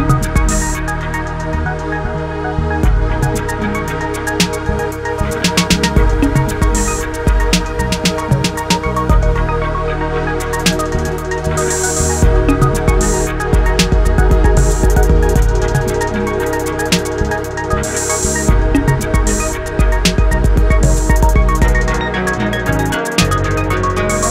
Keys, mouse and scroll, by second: 0.8 shift+click, 1.6 shift+click, 2.2 shift+click, 3.3 ctrl+KP_Add, 4.5 ctrl+i, 6.0-6.9 scroll up 5, 6.9-11.2 drag, 14.5 click, 14.6-15.2 scroll down 7, 15.2 scroll down 2, 16.3 click, 19.2 scroll up 6, 20.2-21.3 drag, 21.3-22.1 scroll down 2, 22.1 Tab, 22.6-24.3 right drag.